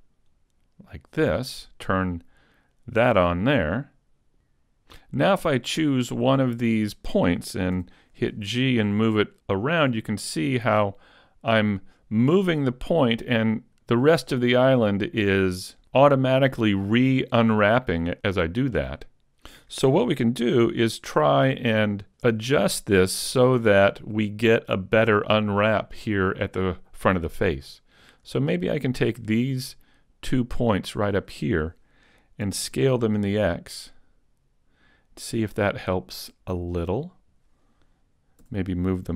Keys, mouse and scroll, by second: 4.2 click, 4.4 a, 4.6 click, 4.8 click, 6.1 right click, 7.8 g, 19.5 right click, 20.2-20.6 scroll up 3, 20.9 shift+middle click, 21.4-21.8 scroll up 1, 21.8 middle click, 28.0 right click, 28.9 shift+right click, 30.0 right click, 30.8 shift+right click, 32.5 s, 37.0 click, 38.5 g.